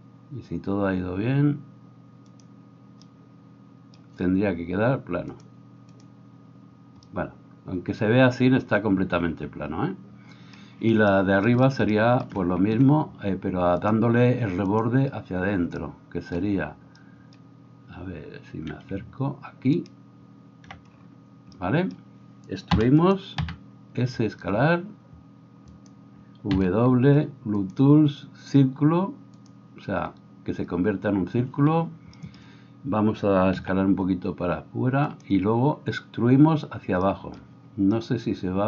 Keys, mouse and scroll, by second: 2.5-5.4 middle drag, 5.4-24.4 drag, 23.9 e, 24.4-38.6 middle drag, 24.4 s, 26.6 w, 33.8 s.